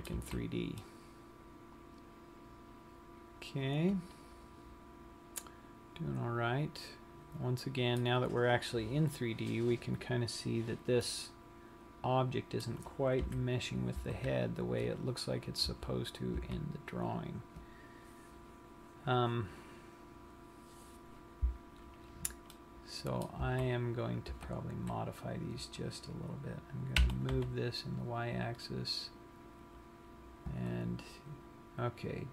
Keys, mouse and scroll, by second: 0.3 z, 0.9 middle click, 8.7 scroll down 1, 10.2-11.2 scroll up 5, 11.2 middle click, 13.5 KP_3, 14.2 z, 16.1 z, 16.7 z, 17.2-17.5 scroll down 1, 21.8-22.2 scroll up 4, 22.8 middle click, 23.8 z, 24.1 scroll down 1, 24.3 Tab, 25.0 scroll up 2, 25.8 click, 27.3 g.